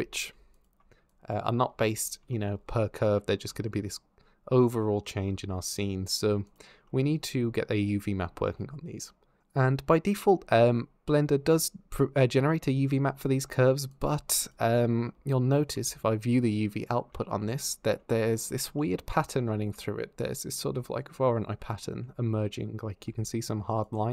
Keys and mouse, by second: 0.3 ctrl+shift+click, 6.3 click, 13.7 ctrl+shift+click, 13.8 ctrl+shift+middle click, 14.2 ctrl+shift+click, 17.0 shift+click, 19.6 shift+middle click, 23.0-24.1 d, 23.0 click.